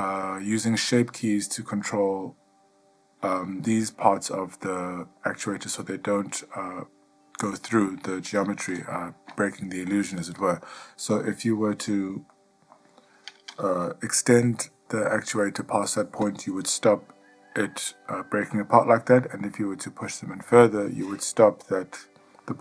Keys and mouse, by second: 2.6 click, 9.1-9.5 ctrl+middle drag, 10.6 click, 12.5-12.9 ctrl+middle drag, 14.6 g.